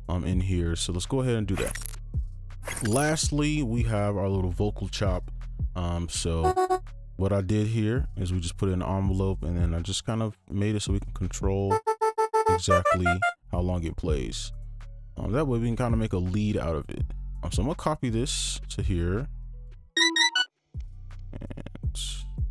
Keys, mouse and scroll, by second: 6.5 double click, 11.8 double click, 17.3 right click, 19.9 space, 20.3 space, 21.5 scroll up 1, 21.8-22.5 scroll down 1.